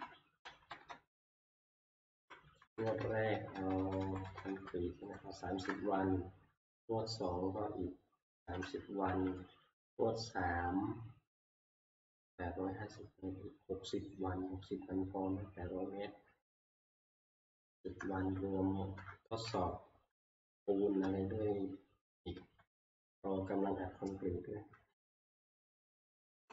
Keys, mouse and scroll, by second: 0.0 click, 0.1 Up, 0.1 Return, 0.4 Tab, 0.4 Right, 0.7 Right, 0.9 Right, 1.3-2.2 Left, 1.9 Right, 2.6 Left, 2.8 Left, 3.1 Left, 3.3 Left, 3.5 Left, 3.8 Left, 4.0 Left, 4.2 Left, 4.5 Left, 5.2-6.2 typing, 8.1-9.1 typing, 17.7-18.0 typing, 19.0 Return, 20.6 shift+Left, 21.0-22.0 shift+Left, 22.3 shift+Left, 22.7 shift+Left, 23.0 shift+Left, 25.2-26.5 Left.